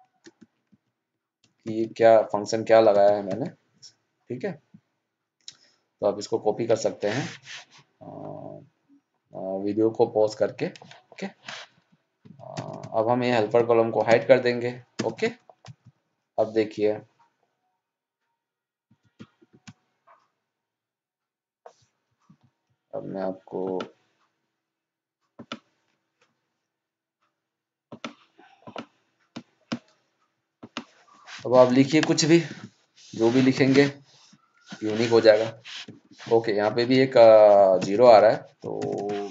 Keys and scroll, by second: 13.9 ctrl+0, 31.8 ctrl+shift+Down.